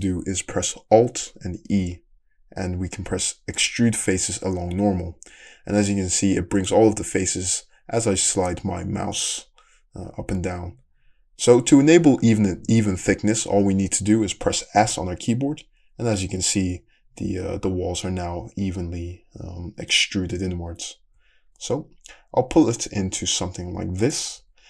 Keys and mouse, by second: 1.7 alt+e, 9.5-24.6 middle drag, 24.4 Tab.